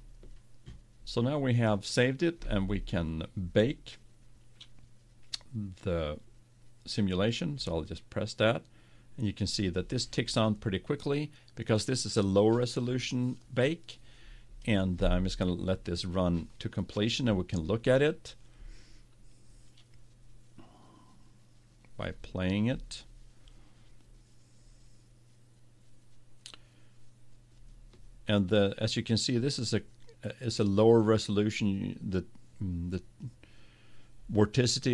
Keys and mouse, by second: 0.0-1.8 drag, 7.6-19.5 drag, 22.0-23.9 drag, 25.1-28.9 middle drag.